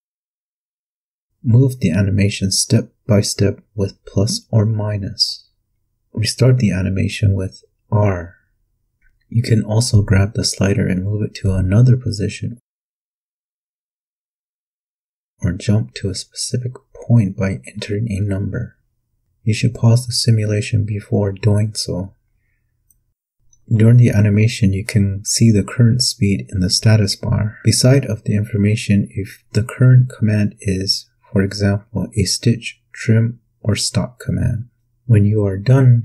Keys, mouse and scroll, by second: 1.2 KP_Add, 2.4 KP_Add, 3.2 KP_Subtract, 4.1 KP_Subtract, 4.6 KP_Subtract, 5.9 r, 8.6 p, 10.2-14.7 drag, 16.3 click, 17.1 KP_0, 35.1 q.